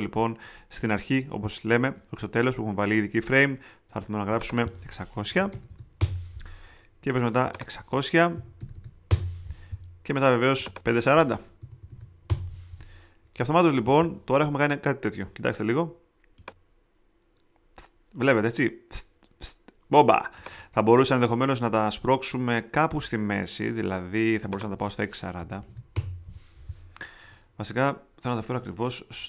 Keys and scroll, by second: 5.0-6.0 typing, 8.1-9.0 typing, 11.3-12.4 typing, 25.1-26.1 typing.